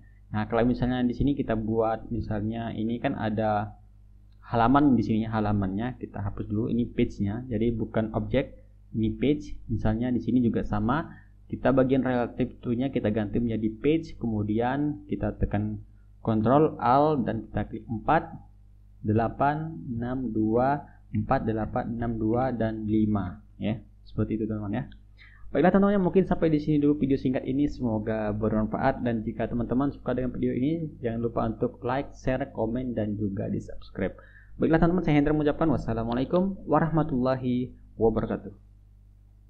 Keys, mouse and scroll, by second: 0.8-1.5 drag, 1.8 click, 3.3 ctrl+shift+r, 3.8 ctrl+shift+click, 4.1 ctrl+shift+click, 4.7 ctrl+shift+click, 6.6 Delete, 6.9 click, 7.4 click, 8.3 click, 9.3 click, 10.2 click, 10.6-11.2 drag, 13.0-14.4 drag, 18.2 ctrl+alt+KP_4, 19.5 ctrl+alt+KP_8, 20.3 ctrl+alt+KP_6, 20.9 ctrl+alt+KP_2, 21.5 ctrl+alt+KP_4, 22.1 ctrl+alt+KP_8, 22.3 ctrl+alt+KP_6, 22.7 ctrl+alt+KP_2, 23.3 ctrl+alt+KP_5, 25.8 click.